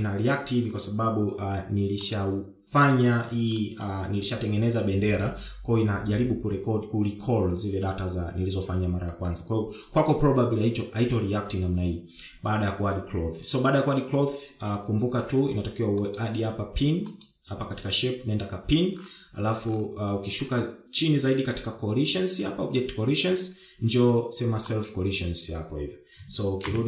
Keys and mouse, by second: 1.0 shift+middle drag, 5.4 shift+middle drag, 18.0-19.1 drag, 26.5 click.